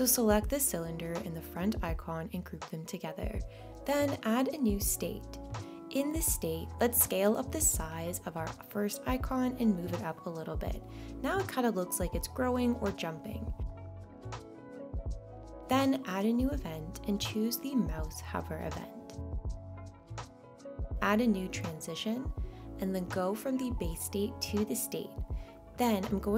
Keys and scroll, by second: 2.5 super+g.